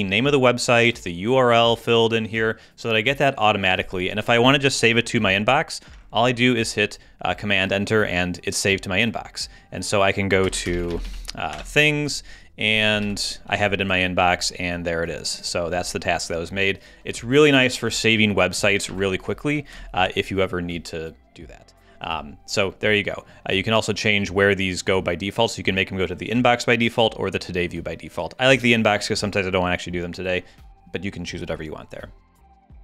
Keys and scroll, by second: 10.4 alt+space, 10.5-11.5 typing, 13.0 super+w, 18.9 super+`.